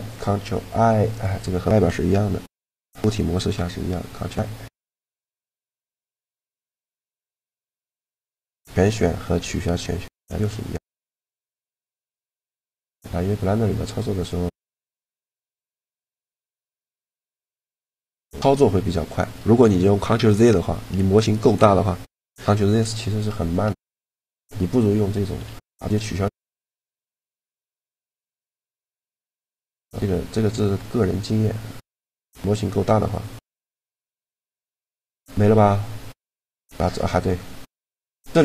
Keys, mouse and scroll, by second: 0.8-2.7 right drag, 3.2 ctrl+i, 3.9 ctrl+i, 4.2 ctrl+i, 4.4 ctrl+i, 6.5 a, 9.6-12.8 typing, 9.9 middle click, 14.2 a, 14.7 b, 16.1 b, 17.8-19.3 middle drag, 23.6-25.2 middle drag, 25.2 a, 25.6 middle click, 26.2 b, 27.3 middle click, 27.7-29.6 typing, 36.7-38.4 middle drag, 38.0-38.4 drag, 38.0-38.4 right drag.